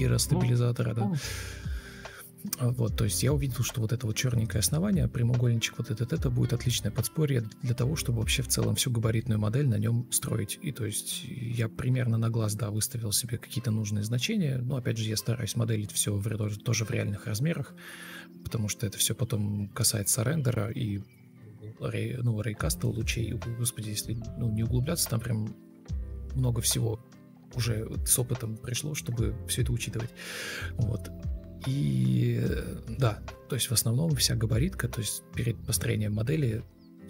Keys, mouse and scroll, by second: 0.6 ctrl+space, 1.8 ctrl+space, 2.2 ctrl+space, 5.0 shift+click, 7.7 ctrl+space, 8.5 ctrl+space, 11.5 ctrl+space, 12.4 ctrl+d, 12.6 ctrl+space, 12.8 ctrl+z, 13.6 ctrl+e, 15.0 ctrl+d, 19.6 Escape, 20.3 ctrl+d, 20.7 Delete, 22.3 ctrl+z, 23.5 shift+t, 24.9 shift+Delete, 25.9 ctrl+d, 29.0 Left, 29.0 shift+r, 29.0 Right, 29.7 ctrl+shift+x, 29.8 Left, 30.2 Right, 30.2 ctrl+z, 30.3 ctrl+z, 30.4 ctrl+z, 31.1 shift+r, 31.3 ctrl+click, 31.5 Left, 31.6 Right, 31.7 Down, 31.8 Up, 32.8-35.0 typing, 33.6 Escape, 34.4 Return, 35.5 Escape, 35.6 Escape, 35.8-36.2 F2, 36.3 BackSpace, 36.6 BackSpace, 36.6 Escape.